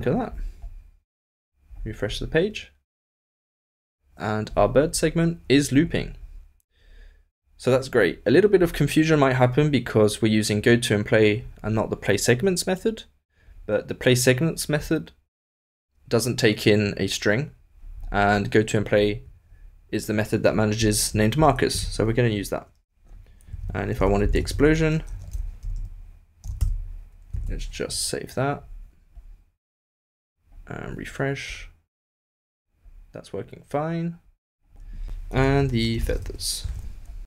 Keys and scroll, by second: 36.3 super+BackSpace, 36.3 super+s.